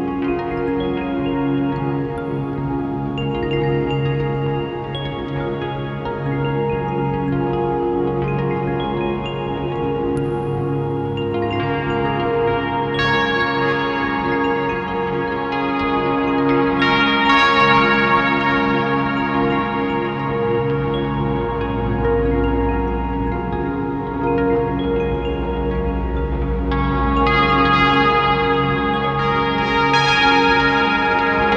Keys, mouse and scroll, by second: 0.7 click, 1.8 click, 2.0-2.3 drag, 2.7 ctrl+t, 3.3-4.9 drag, 3.7 ctrl+z, 5.3-6.5 drag, 7.3 click, 8.3 click, 8.5 shift+d, 8.9-9.2 scroll up 1, 9.3-11.9 drag, 12.2-12.9 scroll up 1, 12.9-15.4 drag, 14.1 scroll down 1, 15.7 click, 16.6 drag, 17.4 scroll down 1, 18.3 a, 20.2 click, 20.8-23.6 drag, 22.0 s, 24.3-27.0 drag, 27.3-27.9 scroll up 1, 27.9-31.5 drag, 29.4 scroll down 2.